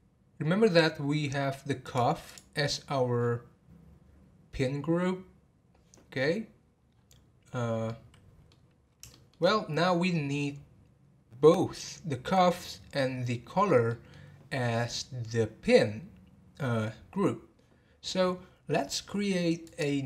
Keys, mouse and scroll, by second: 1.8 click, 2.2 click, 2.7-3.3 scroll down 13, 4.8 scroll down 5, 7.8-9.5 middle drag, 9.5-11.4 scroll up 3, 13.8-16.8 middle drag, 19.6 click.